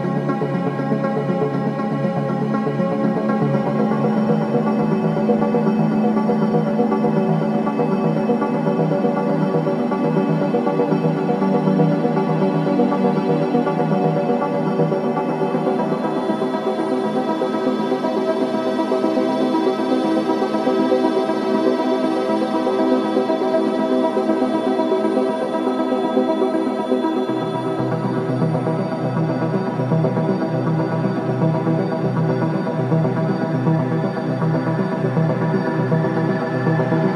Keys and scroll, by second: 11.2 Escape, 22.5 Delete, 23.0 Delete, 27.5 g, 27.9 Return.